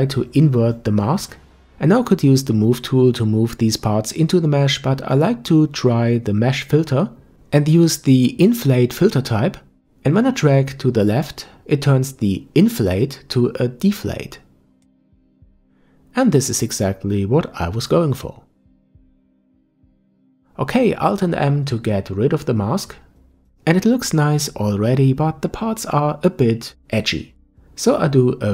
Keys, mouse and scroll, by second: 2.3 click, 5.1 click, 6.2-9.3 drag, 14.5 click, 18.4-21.2 middle drag, 21.2 alt+m, 22.4-23.0 scroll up 2, 23.0 scroll up 1, 23.1-26.1 middle drag, 26.2-28.5 drag.